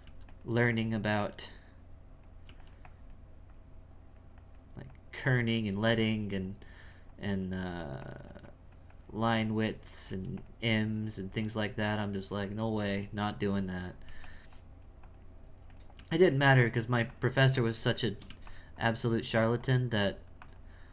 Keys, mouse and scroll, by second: 0.6 f, 1.3-2.4 drag, 2.8-7.6 drag, 8.0-10.0 drag, 10.7-12.7 drag, 13.2 click, 14.5 click, 15.4 f, 15.9 f, 16.6-17.8 drag, 17.8 shift+middle click, 18.3 f, 18.8-20.9 drag.